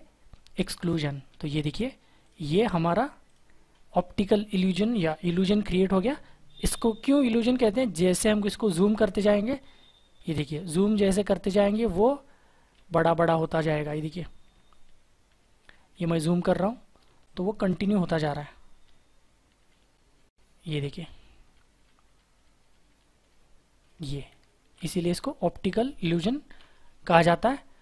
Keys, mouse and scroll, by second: 9.8 ctrl+=, 10.2 ctrl+=, 10.7 ctrl+=, 11.1 ctrl+=, 11.3 ctrl+=, 13.1 space, 14.9 ctrl+=, 15.2 ctrl+=, 15.9 ctrl+=, 16.4 ctrl+=, 17.1 space, 18.8 ctrl+=, 19.4 ctrl+=, 20.1 ctrl+-, 20.9 ctrl+-, 21.0 ctrl+-, 21.1 ctrl+-, 21.4 ctrl+-, 21.6 ctrl+-, 21.7 ctrl+-, 21.8 ctrl+-, 22.7 ctrl+-, 23.9 ctrl+=, 26.4 ctrl+-.